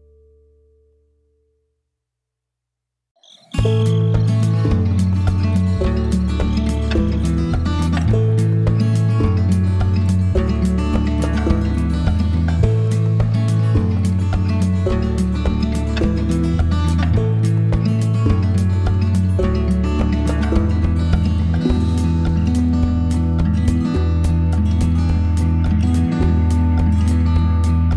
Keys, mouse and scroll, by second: 0.2 middle click, 2.0 click, 3.0 click, 4.0 click, 5.1 click, 6.6 click, 8.5 click, 9.5 click, 10.7 click, 12.1 click, 13.6 click, 18.8 click, 21.5 shift+click, 24.2 click, 26.4 click.